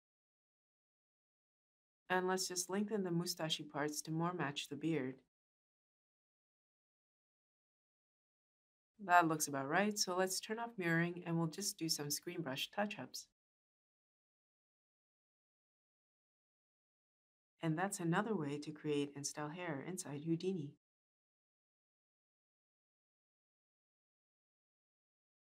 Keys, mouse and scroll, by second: 4.7-6.8 shift+drag.